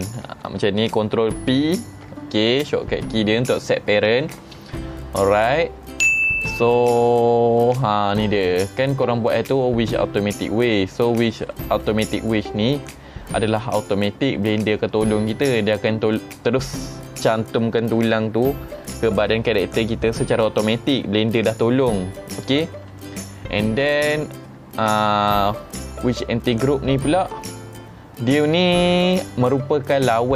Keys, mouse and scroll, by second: 1.6 ctrl+p.